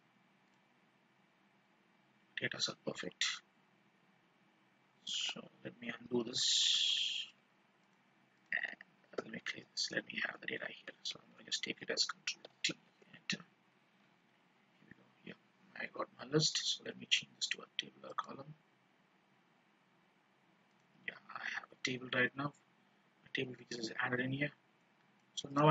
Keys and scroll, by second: 5.1 ctrl+z, 9.3 ctrl+-, 11.1 ctrl+shift+-, 11.3 ctrl+shift+Down, 12.4 ctrl+t.